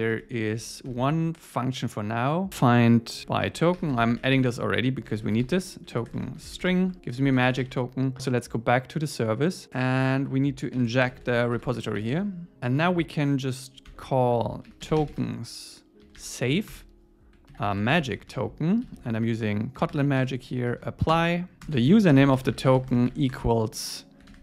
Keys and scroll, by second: 6.9 Tab, 7.3 super+s, 16.7 Return, 21.1 Return.